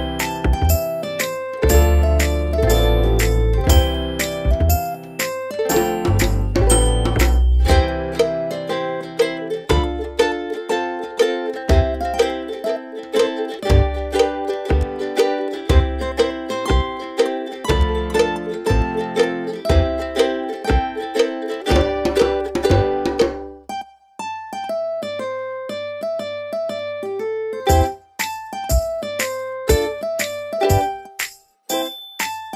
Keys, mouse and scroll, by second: 0.9-2.3 typing, 2.8 click, 8.8 alt+click, 11.4 typing, 13.2 5, 13.6 Return, 16.1 click, 20.0 alt+click, 22.6-23.7 typing, 23.9 ctrl+Return, 25.6 click, 30.6 alt+click.